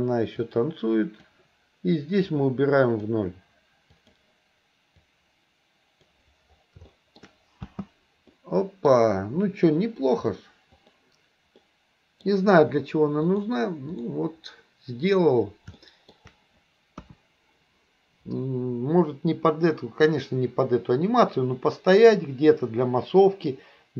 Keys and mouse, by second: 0.5-1.4 drag, 2.4 click, 4.0 click, 5.1-6.2 drag, 6.9 shift+middle click, 7.7 space, 8.4 middle click, 10.8 click, 11.7 middle click, 13.3-14.1 drag, 15.9 shift+middle click, 17.1 KP_1.